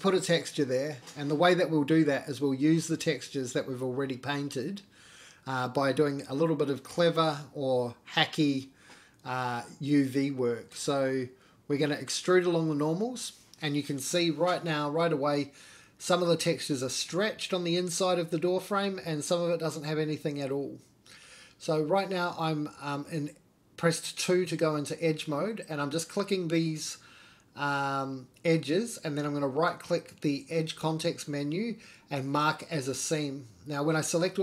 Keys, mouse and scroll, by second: 0.2 g, 2.2 click, 2.6 g, 4.4-4.8 scroll up 2, 4.8-5.2 shift+middle drag, 5.1-5.8 shift+scroll down 2, 5.4 shift+click, 6.3 middle click, 6.4-6.9 scroll up 2, 6.9 middle click, 6.9 scroll down 2, 7.3 middle click, 7.8-9.5 alt+middle drag, 10.0 alt+e, 15.3 middle click, 15.8 Tab, 16.1 scroll down 2, 16.3 middle click, 16.4 click, 16.4-16.9 scroll up 3, 16.9-19.5 middle drag, 19.6-20.2 middle drag, 20.2 scroll down 2, 20.5 middle drag, 21.1 click, 21.8-23.0 middle drag, 23.6 shift+click, 24.0 middle click, 24.8 shift+middle click, 25.3 shift+click, 25.7 middle click, 26.8 shift+click, 27.2 middle click, 28.3 middle click, 29.0-29.9 right drag, 32.1-33.1 right drag.